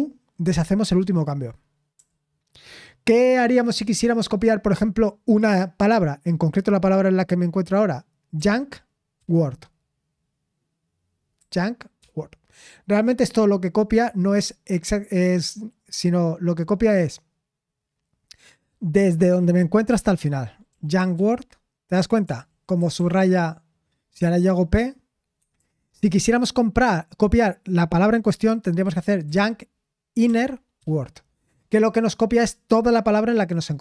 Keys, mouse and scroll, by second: 22.2-24.1 typing, 25.3 Escape, 25.5 u.